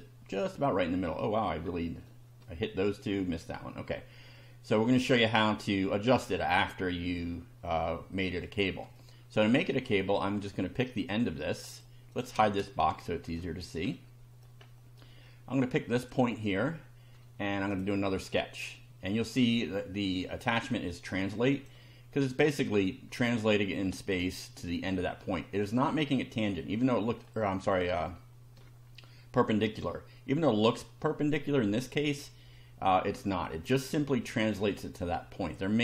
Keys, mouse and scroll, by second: 1.5 scroll down 2, 1.6 scroll up 1, 2.0-2.6 shift+middle drag, 3.6 scroll up 2, 4.2 scroll down 1, 5.1 shift+middle click, 8.9-9.7 shift+middle drag, 11.8 click, 12.2 click, 12.4 space, 13.0 shift+middle click, 13.9 middle click, 14.8 middle click, 16.0 click, 17.7 click, 21.6 click, 22.8-23.9 middle drag, 25.4-27.4 middle drag, 28.0 shift+middle click, 32.8-33.6 middle drag, 35.6 middle click.